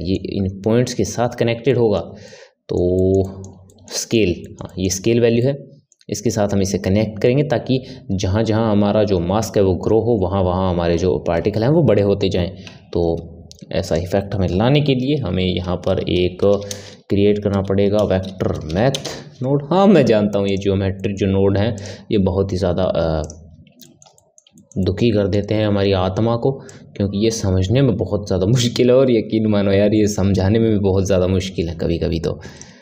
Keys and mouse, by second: 12.8 shift+a, 20.9-21.7 middle drag, 21.7-23.8 drag, 23.8-26.7 ctrl+middle drag, 26.7 click.